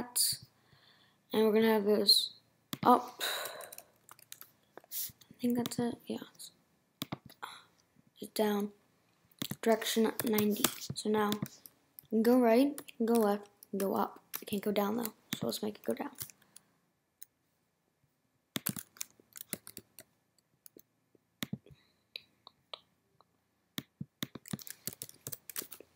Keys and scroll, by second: 3.4 =, 9.9-10.9 typing, 11.1 Return, 12.0 Right, 12.8 Left, 14.9 Down, 24.6-25.5 typing.